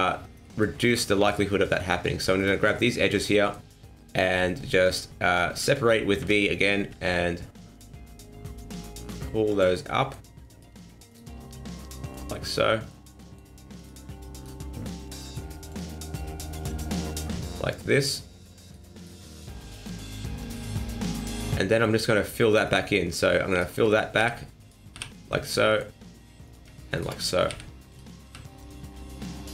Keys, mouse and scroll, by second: 0.4 middle click, 1.2 alt+right click, 1.6 middle click, 2.4 alt+shift+right click, 2.7 middle click, 6.2 v, 9.8 middle click, 10.5 right click, 11.1 shift+right click, 11.7 click, 12.3 middle click, 13.2 middle click, 13.8 right click, 14.4 shift+right click, 15.0 click, 15.8 middle click, 16.6 click, 17.2 middle click, 18.0 right click, 18.6 right click, 18.9 right click, 19.3 right click, 19.6 shift+right click, 20.1 click, 20.7 middle click, 22.6 right click, 23.5 shift+right click, 24.2 f, 24.6 right click, 24.9 f, 25.3 middle click, 26.4 right click, 26.9 shift+right click, 27.5 f, 27.9 right click, 28.2 f, 28.6 middle click.